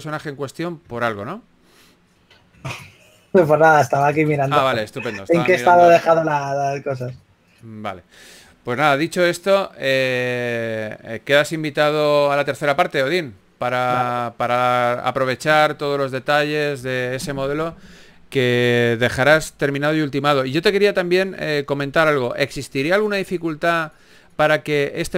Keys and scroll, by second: 1.3-3.0 typing, 4.4 shift+s, 6.0 shift+f, 6.4 shift+f, 7.3 s.